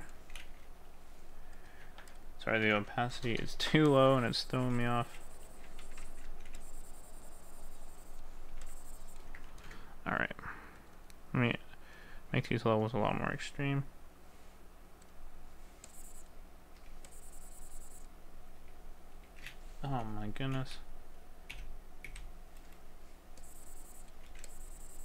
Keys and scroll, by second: 9.6 ctrl+z.